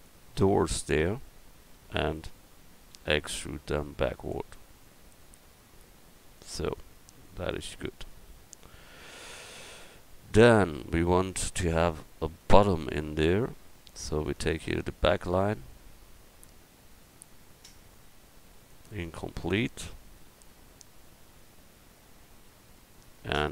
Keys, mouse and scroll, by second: 2.9 e, 3.7-6.7 drag, 7.4 middle click, 9.6 a, 12.7 middle click, 14.2-15.5 drag, 17.8-20.5 middle drag.